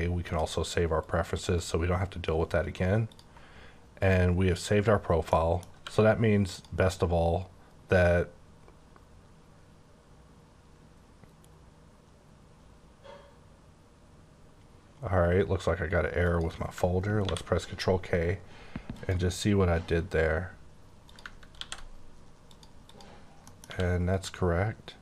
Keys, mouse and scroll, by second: 0.2 click, 1.0 click, 4.0 click, 5.2 middle click, 5.7 q, 6.4 click, 16.3 click, 17.2 ctrl+k, 18.9 click, 21.0 click, 21.6 ctrl+c, 22.4 click, 22.8 click, 23.4 middle click, 23.7 q, 24.0 click.